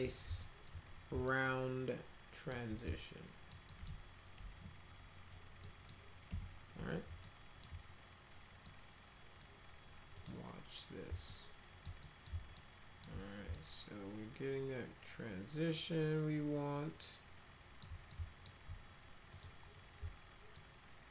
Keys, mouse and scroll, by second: 0.1 middle click, 0.4 alt+middle click, 1.3-2.5 alt+middle drag, 2.9 alt+middle click, 3.7 alt+middle click, 4.4 F3, 5.6 middle click, 6.3 F3, 7.2 alt+middle click, 8.6 middle click, 10.2 click, 11.3 alt+middle click, 12.0 middle click, 12.6 alt+middle click, 13.5-17.8 alt+middle drag, 18.1 alt+middle click, 19.3 click, 20.5-21.1 alt+middle drag.